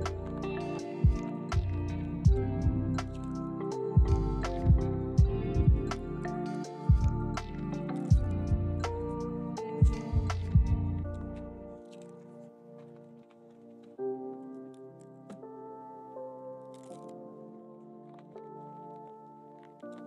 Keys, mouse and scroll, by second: 0.2 ctrl+z, 1.9 ctrl+click, 2.6 j, 3.5 ctrl+click, 3.8 j, 4.1 double click, 4.3 scroll down 1, 4.4 middle click, 6.5 double click, 6.7 scroll up 1, 7.0 middle click, 8.5 shift+click, 8.6 m, 10.5 shift+click, 10.7 m, 11.7 shift+click, 12.0 m, 13.2 ctrl+z, 13.8 m, 16.0 ctrl+click, 16.2 m, 17.0 ctrl+z, 17.4 m, 18.8 ctrl+z, 19.4 shift+click.